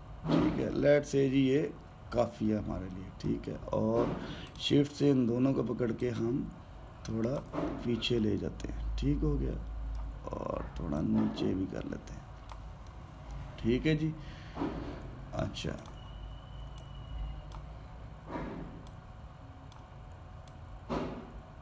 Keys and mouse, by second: 5.2 shift+click, 6.7 click, 8.4 alt+middle click, 9.2-11.7 middle drag, 11.7 click, 13.7-16.5 middle drag, 16.5 click, 17.5 click, 19.7-20.5 drag, 21.2 click.